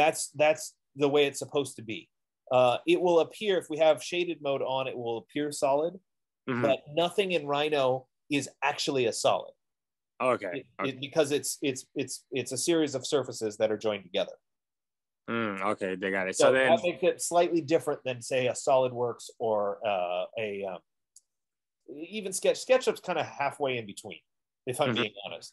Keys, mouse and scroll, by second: 0.5 click, 3.0 click, 4.4 click, 11.4 F15.